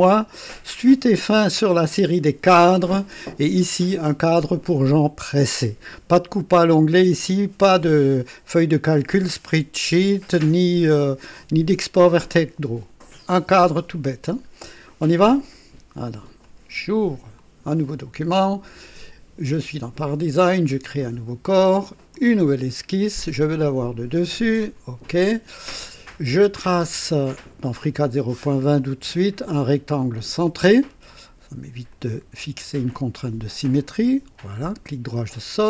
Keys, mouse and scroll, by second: 0.4 click, 15.3 click, 16.4 click, 17.4 click, 20.8 click, 22.1 click, 23.5 click, 24.6 click, 27.6 click, 30.0 click, 31.9 click, 33.7 click, 34.5 right click, 34.6 middle click, 34.7 right click.